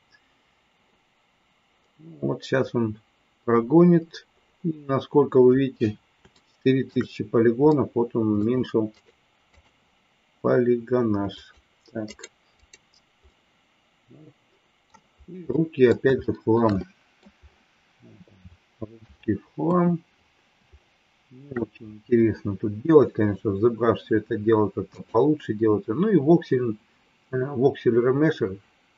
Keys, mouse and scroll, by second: 6.4 shift+middle click, 7.6 middle click, 8.9 right click, 11.4 click, 12.0 right click, 13.3-14.9 middle drag, 15.5 middle click, 16.1 shift+middle click, 16.8 middle click, 18.4 middle click, 19.6 KP_1, 20.8 shift+middle click.